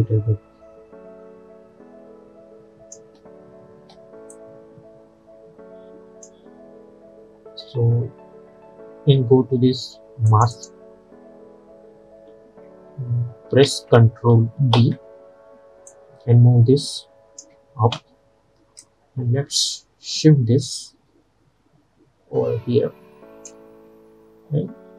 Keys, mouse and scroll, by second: 3.1 space, 4.4-10.4 drag, 13.5 ctrl+Num_Lock, 13.5 click, 13.7 ctrl+a, 14.8 ctrl+d, 16.0-24.9 drag.